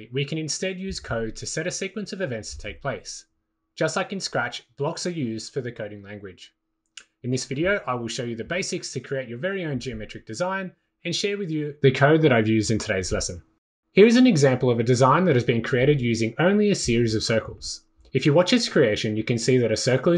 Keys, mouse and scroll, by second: 1.8 click, 13.8 click.